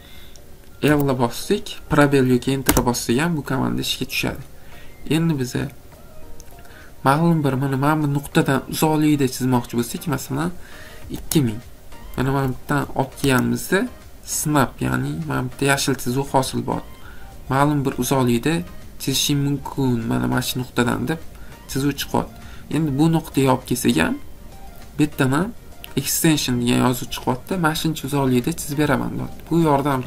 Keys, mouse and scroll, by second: 11.2 2, 12.3 Escape, 15.6 middle click, 15.7 middle click, 22.0 middle click, 22.0 middle click, 22.1 middle click, 22.4 middle click, 22.5 middle click.